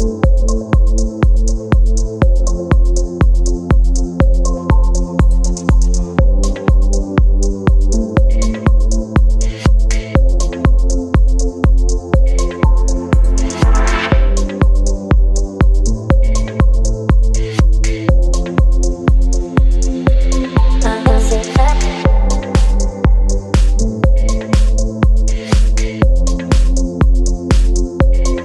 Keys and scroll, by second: 0.5 space, 5.0 v, 17.4 space.